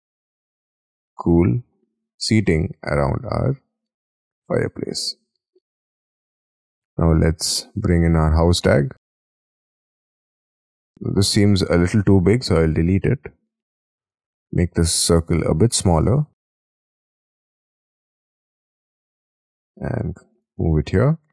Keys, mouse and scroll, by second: 2.0-2.6 scroll up 10, 2.6 middle click, 3.5 scroll down 6, 4.5-5.3 scroll down 14, 4.7 space, 8.7 middle click, 10.0 middle click, 10.5 middle click, 11.1 scroll up 5, 12.1 scroll down 5, 12.5-12.9 scroll up 6, 12.9 Delete, 13.3-13.7 scroll up 3, 14.5 double click, 16.1 d, 16.9 s, 18.6 space, 18.9 m, 20.6 space, 20.9-21.3 scroll up 9.